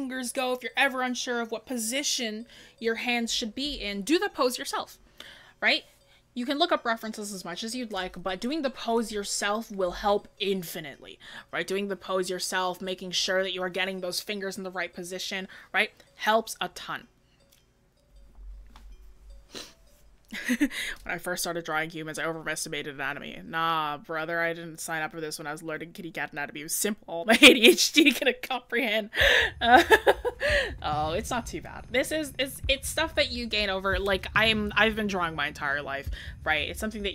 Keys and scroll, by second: 8.4-8.9 scroll down 1, 8.9-9.2 scroll up 1, 32.0-32.7 scroll down 1, 32.7-33.0 scroll up 1.